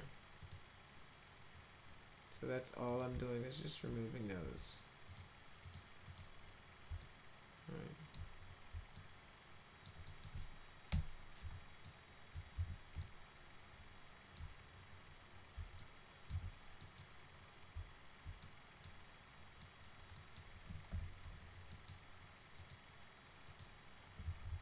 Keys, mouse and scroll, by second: 0.3 click, 2.8 click, 5.0 click, 5.6 click, 6.0 click, 6.9-8.1 alt+middle drag, 8.9 alt+middle click, 10.0 alt+middle click, 10.8 Delete, 11.8-12.3 alt+middle drag, 12.5 z, 12.9-14.3 alt+middle drag, 15.7 alt+middle click, 16.2 z, 16.7 middle click, 18.4 middle click, 19.5 middle click, 20.1 middle click, 20.8 f, 21.2 z, 21.6 middle click, 22.5 right click, 23.4 click, 24.2 ctrl+z, 24.4 ctrl+z.